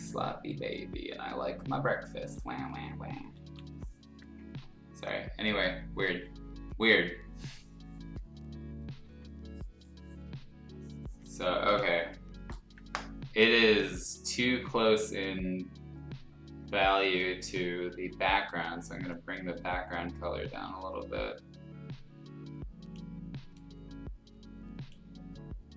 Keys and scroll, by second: 2.3 [, 3.1 ], 4.6 x, 6.1 ctrl+z, 9.0 x, 11.6 ctrl+z, 17.4 ctrl+u.